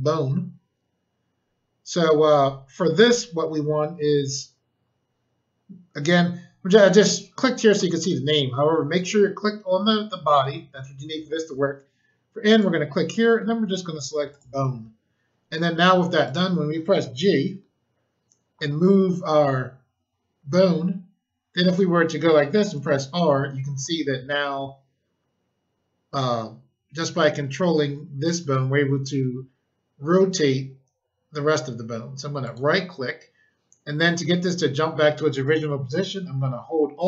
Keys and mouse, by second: 8.9 click, 12.5 click, 14.2 click, 16.2 click, 17.4 g, 21.6 click, 22.7 r, 32.4 right click.